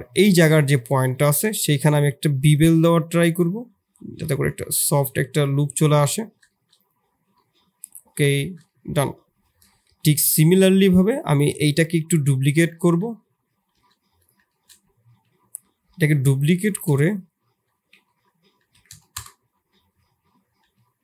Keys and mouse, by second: 0.3 click, 0.9 2, 3.9-5.7 drag, 5.9 Tab, 6.4 shift+click, 7.3 middle click, 8.3 shift+middle click, 8.6 middle click, 9.9 KP_2, 9.9 KP_3, 11.6 KP_3, 11.6 KP_1, 12.8 ctrl+KP_1, 13.7 shift+d, 14.4 shift+click, 15.8 r, 18.5 r.